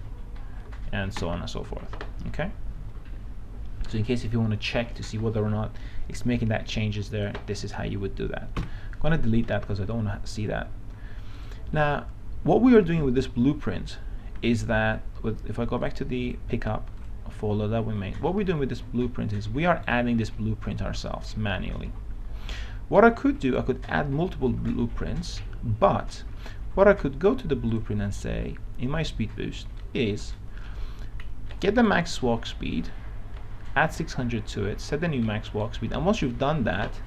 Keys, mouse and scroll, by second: 0.0-0.7 typing, 1.8 Escape, 6.7-7.8 drag, 8.9 Delete, 10.6 click, 19.0-20.0 right drag, 20.0-22.5 right drag, 22.5-24.0 right drag, 28.0-29.0 drag, 30.0-31.1 right drag, 31.5 scroll down 1, 31.7-33.1 right drag, 36.5 click.